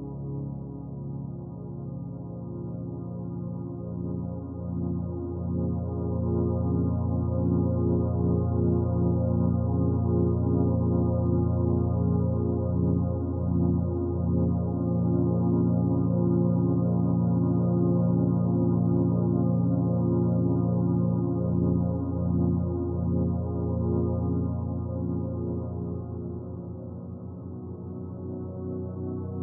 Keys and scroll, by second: 11.9 ctrl+z, 21.2 ctrl+z.